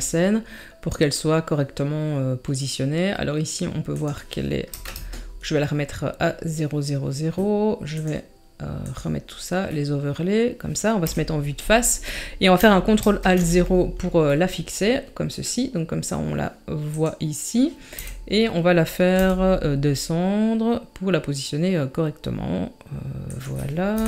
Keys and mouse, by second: 4.0 click, 7.9 click, 8.8 click, 9.8-10.2 middle drag, 11.0 KP_1, 13.0 ctrl+alt+KP_0, 14.4 middle click, 15.5 middle click, 16.9 click, 17.9 KP_3, 19.2 g, 23.9 KP_7.